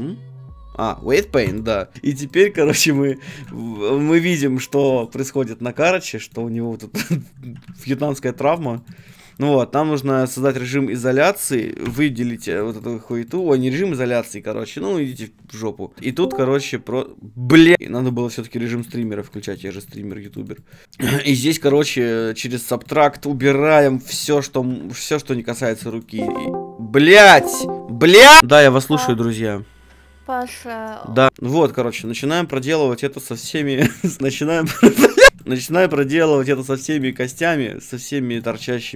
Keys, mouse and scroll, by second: 1.9-3.7 middle drag, 2.3-4.3 right drag, 3.7 g, 4.3 middle click, 4.8-6.8 drag, 6.8 middle click, 7.4 ctrl+z, 10.5-12.5 drag, 11.8 l, 12.5-13.5 right drag, 12.6 middle click, 14.7 f, 15.2-16.3 drag, 21.5-25.5 drag, 24.7 g, 25.5 middle click, 25.7-27.8 right drag, 27.8 middle click, 31.3 click, 31.4 middle click, 31.7-35.3 drag, 32.5-34.2 middle drag, 32.5-34.2 right drag, 35.3 middle click, 35.4-37.4 drag, 37.4 middle click, 38.3 click.